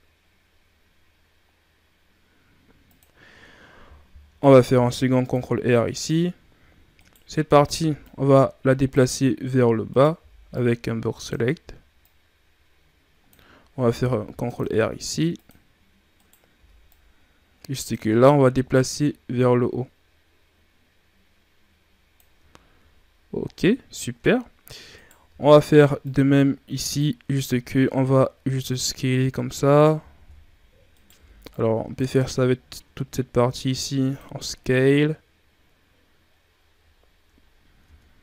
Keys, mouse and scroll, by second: 4.7 ctrl+r, 6.9 right click, 7.6 b, 9.8 right click, 10.1 b, 11.9-13.9 drag, 13.9 ctrl+r, 16.1 right click, 16.5 b, 18.6-21.8 drag, 22.4-23.2 ctrl+scroll down 3, 23.5-24.9 scroll up 3, 24.9 right click, 25.2 b, 27.3 s, 30.0 ctrl+z, 30.8 right click, 31.1 b, 32.1 s, 37.8 Tab.